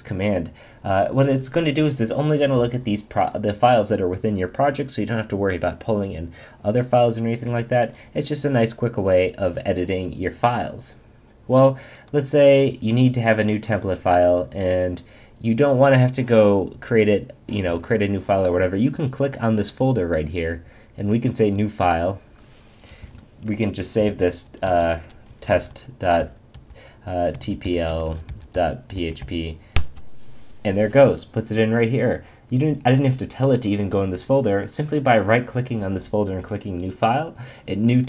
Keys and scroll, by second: 23.0 super+s, 29.7 Return.